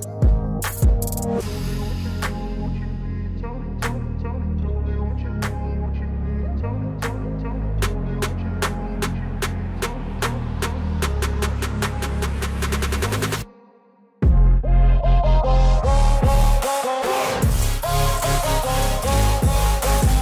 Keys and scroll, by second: 1.3 F4, 4.8 alt+w.